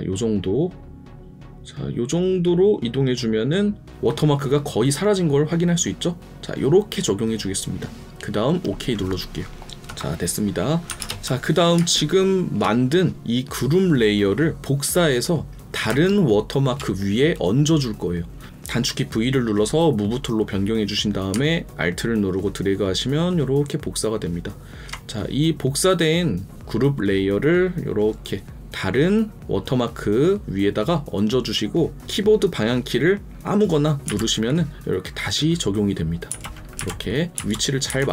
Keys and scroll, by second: 9.6 ctrl+KP_Subtract, 10.8 ctrl+KP_Subtract, 11.0 ctrl+KP_Add, 11.7 ctrl+space.